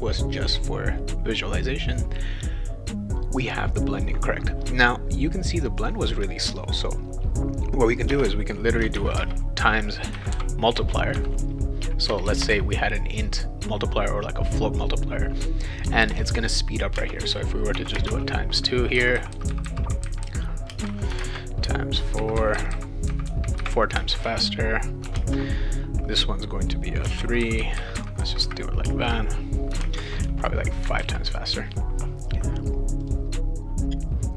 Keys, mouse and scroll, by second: 5.8 click, 8.1-12.4 typing, 15.9-18.0 typing, 20.7 space, 21.1 shift+8, 21.2 space, 21.6 4, 24.0 space, 25.0 shift+9, 25.2 space, 27.0 3, 28.8 space, 29.7 shift+8, 29.8 space, 30.2 5, 31.0 ctrl+s, 33.0 click, 34.0 click.